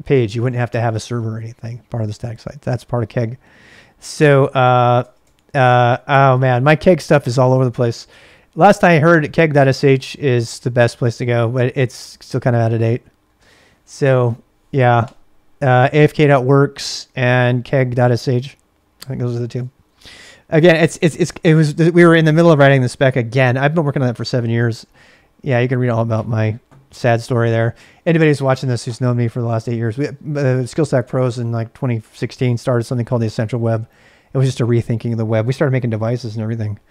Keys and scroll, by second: 2.1 ctrl+a, 2.3 ctrl+a, 4.4-5.7 typing, 5.9 ctrl+a, 6.4 ctrl+a, 8.1 ctrl+c, 9.7-11.0 typing, 19.5-20.7 typing.